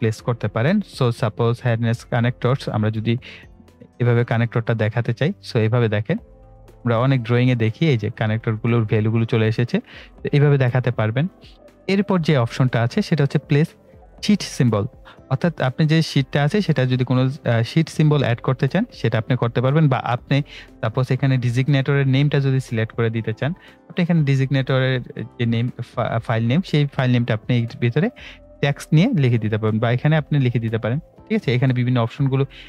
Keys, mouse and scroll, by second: 22.0 click, 23.8 right click, 24.9 click, 27.6 click.